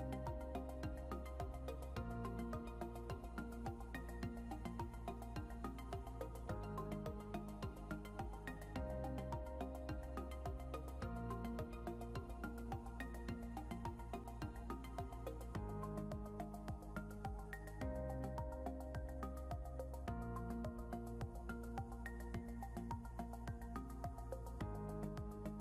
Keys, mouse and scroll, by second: 4.8 double click, 10.9 scroll up 1, 15.8 right click, 21.0 right click.